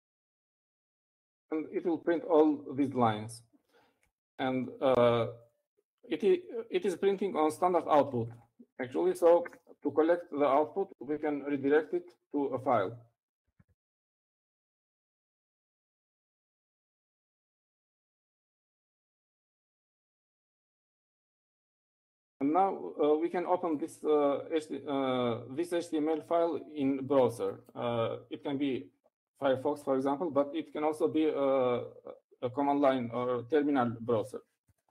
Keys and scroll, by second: 0.0-1.4 typing, 5.5 Up, 10.0 shift+., 11.2 space, 14.6-20.0 typing, 21.6-22.4 typing.